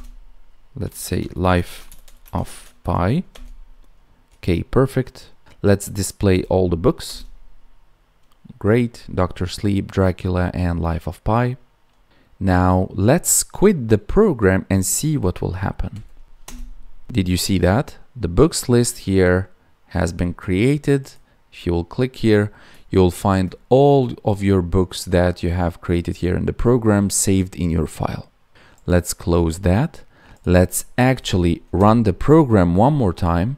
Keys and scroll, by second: 1.6 space, 2.1 space.